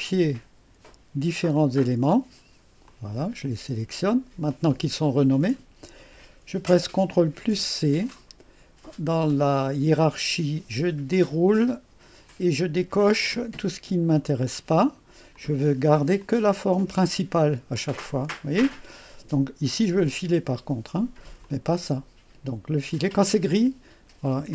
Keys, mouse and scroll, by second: 1.6 click, 2.9 click, 4.6 click, 7.4 ctrl+c, 11.2 click, 14.1 click, 15.4 click, 16.3 click, 16.8 click, 17.8 click, 20.0 click, 21.5 click.